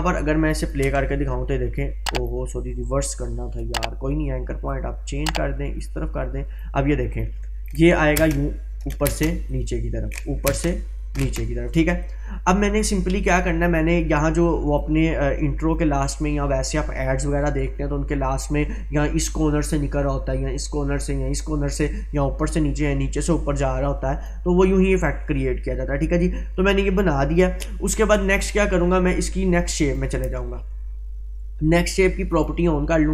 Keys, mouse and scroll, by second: 0.5 click, 0.8 space, 2.1-2.4 drag, 3.4-4.4 click, 5.0-5.3 click, 8.2 space, 9.5-10.4 drag, 24.3-27.5 drag, 29.9 click, 32.3 click.